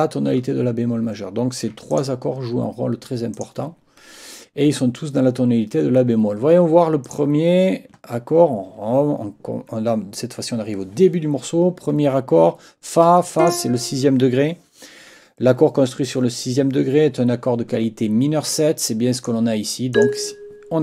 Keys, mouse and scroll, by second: 1.9 shift+click, 3.3 click, 7.0 click, 13.4 click, 19.2 click, 19.9 click.